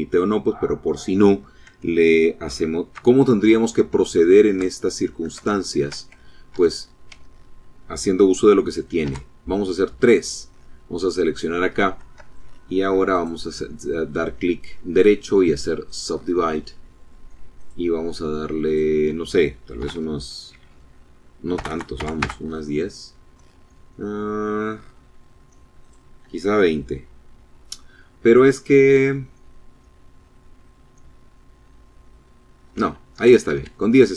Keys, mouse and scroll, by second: 2.6 scroll down 2, 3.1 shift+click, 3.7 shift+click, 4.6 shift+click, 5.1 shift+scroll up 2, 5.6 Tab, 8.0 3, 9.3 click, 10.7 scroll up 1, 11.4 shift+click, 12.1 click, 14.9 click, 16.6 click, 17.7 click, 18.8 KP_4, 18.9 KP_0, 20.6 BackSpace, 21.0 KP_0, 21.3 KP_Enter, 23.7 scroll up 2, 24.8 click, 32.2 Escape, 33.9 click.